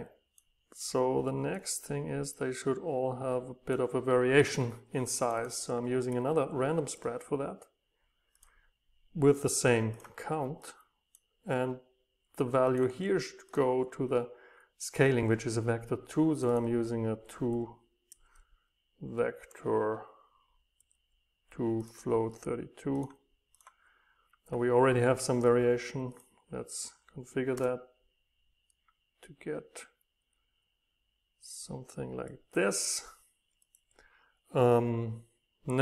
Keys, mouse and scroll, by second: 0.0-3.0 right drag, 3.0-7.4 drag, 7.6-9.9 drag, 14.8 right click, 19.4 Delete, 21.9-25.8 drag, 27.5 Return, 28.8 right click, 28.8 click, 29.0 right click, 29.2 click, 29.9-33.7 right drag, 33.7 click, 35.7 right click.